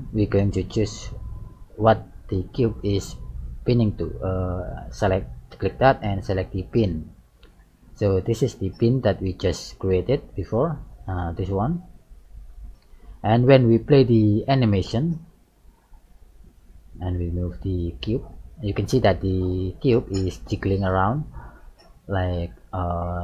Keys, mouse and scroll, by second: 5.5 click, 12.5 click, 15.0 click, 17.2 g, 20.5 click, 22.2 middle click.